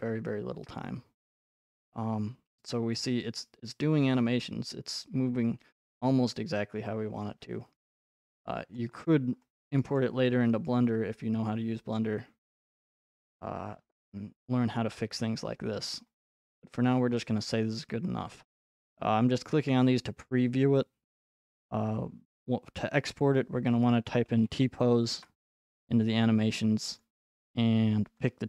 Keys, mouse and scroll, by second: 3.0 click, 6.9 middle click, 6.9-7.5 scroll, 8.8-10.0 middle drag, 9.0 scroll, 10.1-10.5 scroll, 15.4-16.3 scroll, 21.4-23.5 drag, 23.5-25.8 typing, 25.1 Return, 27.0 click, 27.0 typing, 28.3 click.